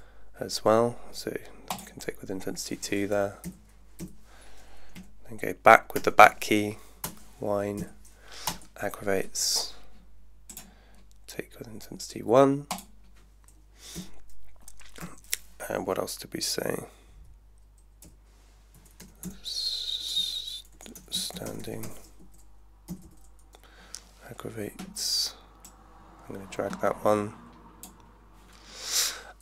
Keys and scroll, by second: 3.5 Left, 4.9-6.7 typing, 7.0 Return, 7.7 Down, 8.5 Return, 14.0 Left, 18.1 Left, 18.5-22.4 typing, 22.9 Down.